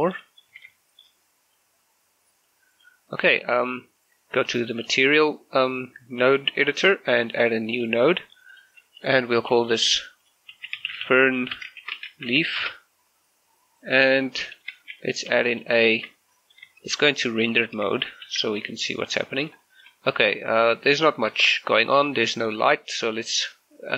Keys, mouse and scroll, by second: 0.0 middle click, 0.6 z, 0.8 shift+middle click, 2.5-4.9 drag, 7.8 click, 10.6-12.4 typing, 12.6 Return, 14.2-14.5 scroll up 1, 14.6 shift+middle click, 15.1 click, 15.4 g, 15.6 click, 16.4 middle click, 16.9 shift+middle click, 17.2 scroll up 1, 17.4 shift+middle click, 18.3 shift+z, 19.4 scroll up 1, 19.7 shift+middle click, 20.1-20.6 scroll down 1, 20.6 middle click, 21.8-22.3 scroll up 1, 22.3 middle click.